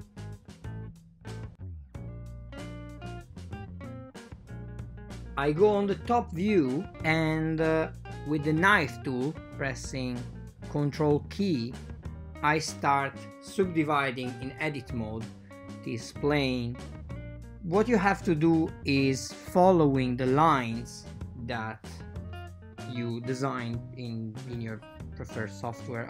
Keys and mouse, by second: 1.2-1.7 drag, 2.5 KP_7, 3.1 Tab, 5.1 a, 5.6 ctrl+a, 5.8 ctrl+r, 8.7 ctrl+r, 10.9 ctrl+r, 12.7 ctrl+r, 13.6 super+z, 14.1 shift+super+z, 14.5 ctrl+r, 18.6 ctrl+r, 20.0 super+z, 20.3 ctrl+r, 22.0 super+z, 22.3 ctrl+r, 24.1 ctrl+r.